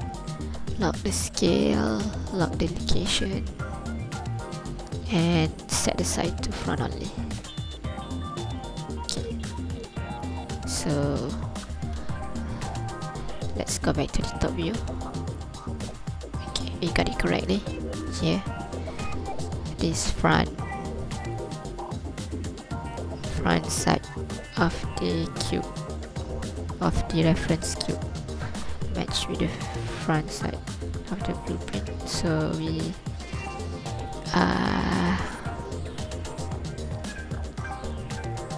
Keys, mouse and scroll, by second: 0.8 click, 1.1 click, 1.4 click, 6.9 shift+click, 10.8 m, 13.1 alt+a, 13.5 ctrl+click, 14.3 KP_7, 14.8 scroll up 2, 15.1 ctrl+click, 15.7 scroll up 1, 18.0 right click, 19.4 Tab, 24.4 ctrl+click, 26.1 right click, 27.5 alt+a, 27.9 scroll up 2, 28.2-28.6 scroll down 2, 28.5 scroll up 2, 29.3-29.8 scroll down 3, 30.3 ctrl+click, 31.1-31.4 scroll up 2, 31.8 shift+click, 35.1 z, 35.5 ctrl+click, 35.9 scroll down 2, 36.4 shift+click, 37.5 Tab, 38.0 right click.